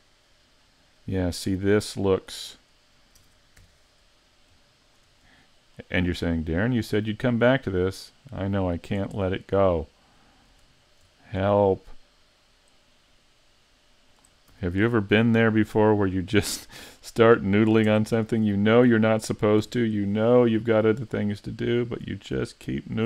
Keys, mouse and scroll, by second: 0.7-1.5 scroll up 2, 1.5 Tab, 1.9 middle click, 3.2 ctrl+Tab, 4.3 right click, 4.9 shift+right click, 5.2 middle click, 6.7 click, 9.2 middle click, 10.8 right click, 11.3 shift+right click, 11.7 middle click, 13.1 click, 14.5 a, 14.9 middle click, 16.5 middle click, 17.2-17.8 scroll up 1, 17.9 ctrl+Tab, 18.8 right click, 19.6 g, 21.1 click, 21.8 right click, 22.3 shift+right click, 22.9 right click.